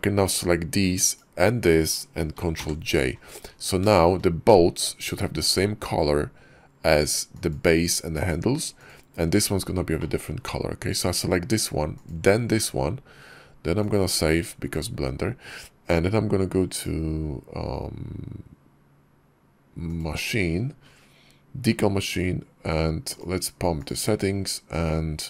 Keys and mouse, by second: 0.9 shift+middle click, 2.5 ctrl+j, 3.8 shift+click, 7.3 click, 8.0 click, 8.6 click, 9.8 middle click, 13.8 click, 16.6 click, 19.8 click, 22.9 click, 23.6 click.